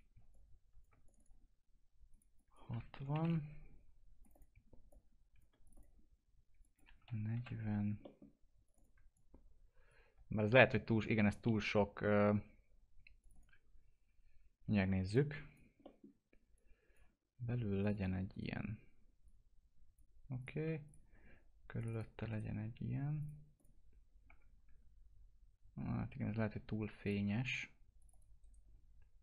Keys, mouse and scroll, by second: 0.3 shift+click, 1.0 click, 2.9 6, 4.2 click, 4.9 shift+click, 5.6 click, 7.0 4, 8.0 middle click, 8.6 click, 9.1 shift+click, 13.2 click, 15.8 middle click, 16.5 click, 18.3 right click, 19.2 click, 21.8 click, 22.3 right click, 23.2 click, 24.3 F4, 24.6-25.6 scroll down 1, 27.0 click, 28.4 right click.